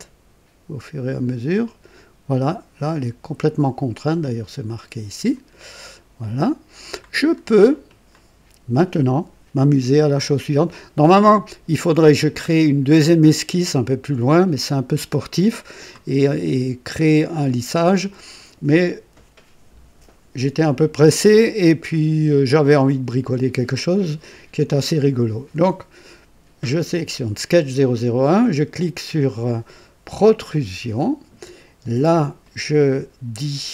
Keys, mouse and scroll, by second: 1.6 click, 5.3 click, 6.2-7.1 drag, 7.3 scroll up 2, 14.5-16.0 drag, 21.2-23.4 drag, 30.2 click, 32.4 click.